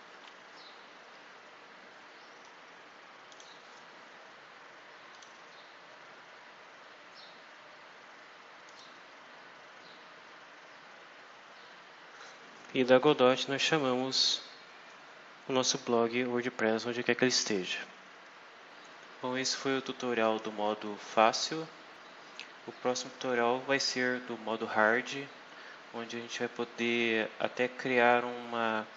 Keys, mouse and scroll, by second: 3.2 click, 5.0 click, 8.6 click, 11.5-11.9 scroll down 2, 12.2-12.5 scroll down 2, 13.7 scroll up 2, 17.3-17.8 scroll down 2, 18.1-18.5 scroll down 2, 19.0 scroll down 2, 19.6-20.0 scroll up 2, 22.3 scroll down 2, 22.9-23.3 scroll up 2, 25.5 scroll down 2, 26.1-26.5 scroll up 2, 28.8 scroll down 2.